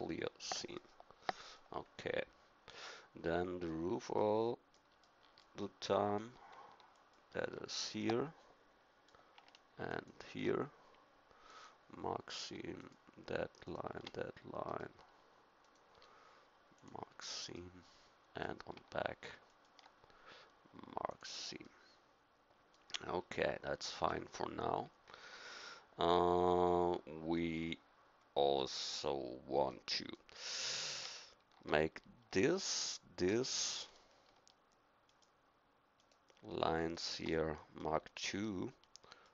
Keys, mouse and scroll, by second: 0.8-2.7 middle drag, 2.9 middle click, 8.0 middle click, 9.9-11.5 middle drag, 11.5 click, 11.5 right click, 11.8-16.8 middle drag, 17.6 middle click, 22.0 click, 22.3 click, 22.4 middle click, 22.6 middle click, 23.9 middle click, 29.8 click, 33.4-39.3 middle drag.